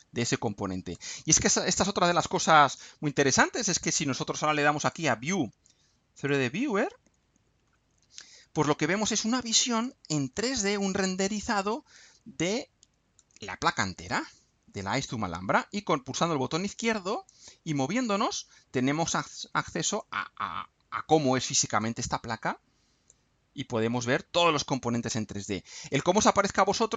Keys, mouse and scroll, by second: 0.0-1.1 drag, 2.0-2.3 scroll down 2, 3.1-3.7 scroll up 4, 4.8 click, 6.1 click, 8.4 scroll up 2, 9.8-11.2 drag, 11.5-13.3 drag, 14.1-17.5 drag, 17.7-19.3 drag, 19.9-21.3 drag, 21.8-23.3 drag, 24.8-25.5 drag, 25.7 scroll up 1.